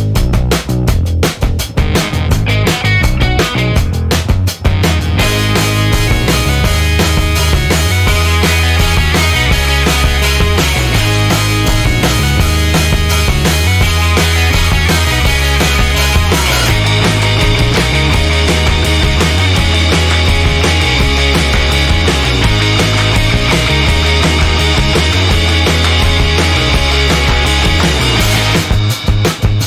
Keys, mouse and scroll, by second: 0.6 0, 1.3 click, 1.6 1, 2.4 click, 3.1 click, 3.8 click, 8.5 click, 10.5 click, 12.4 click, 13.8 click, 15.1 click, 17.7 click, 18.6 click, 20.0-20.7 scroll down 2, 21.0-21.6 scroll down 4, 22.2-22.6 scroll down 2, 22.8 scroll down 2, 24.1 click, 25.2 click, 26.9 click, 27.3 click, 28.3 BackSpace, 29.2 1, 29.5 0.